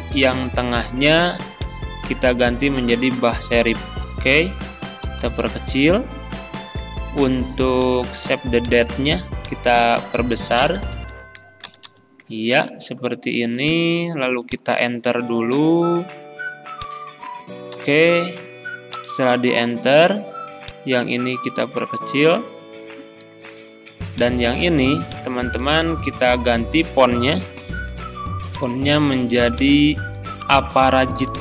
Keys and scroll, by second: 2.5 b, 2.6 a, 2.8 h, 3.6 Return, 5.1 ctrl+[, 10.7 ctrl+], 15.1 shift+Return, 17.8 Delete, 22.5 ctrl+[.